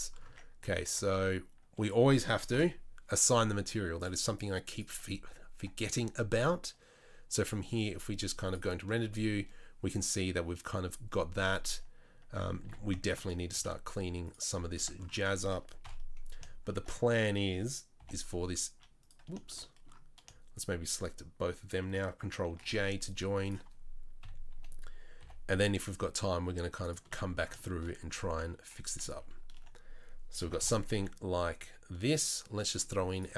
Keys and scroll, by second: 0.2 Tab, 0.9 Tab, 2.5 ctrl+l, 5.5 Tab, 11.6 Tab, 12.6 2, 13.5 s, 14.8 Tab, 15.8 KP_3, 17.9 g, 22.6 ctrl+j, 24.2 KP_3, 25.1 g, 28.3 KP_3, 28.8 KP_1, 30.4 g.